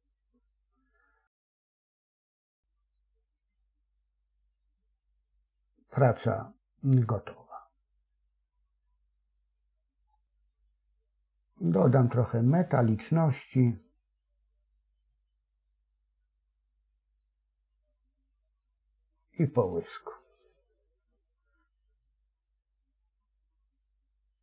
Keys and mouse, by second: 2.3-10.0 middle drag, 10.0-12.1 drag, 14.3-19.7 drag, 22.9-24.4 drag.